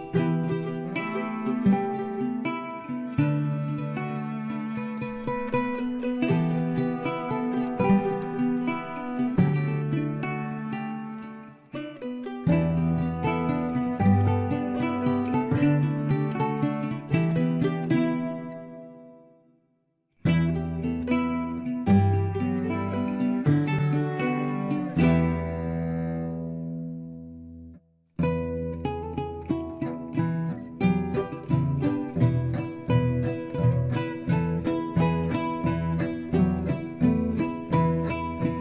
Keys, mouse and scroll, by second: 0.7 Tab, 1.9-2.5 scroll up 2, 2.6 shift+middle click, 3.3-3.6 scroll up 1, 3.6 Tab, 4.0 Tab, 5.4 click, 6.5-7.0 scroll down 2, 7.0-10.7 middle drag, 10.7-11.9 scroll up 2, 11.9 click, 12.7 shift+click, 14.4 m, 16.4-16.9 scroll down 2, 16.9 middle click, 17.7-18.4 scroll up 2, 18.4-19.2 scroll up 1, 19.2 click, 20.0-21.7 middle drag, 21.7 shift+click, 22.9 m, 24.3-26.4 scroll down 4, 26.4-27.2 scroll down 1, 34.8 a, 36.2 m.